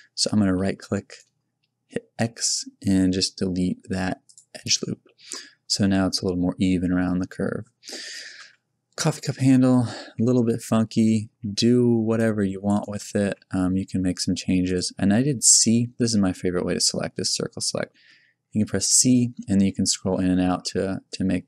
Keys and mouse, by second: 1.0-2.2 right drag, 2.2 x, 5.7 Tab, 6.9 Tab, 8.4 KP_1, 9.4-11.2 typing, 13.2 g, 14.9 a, 15.3 c.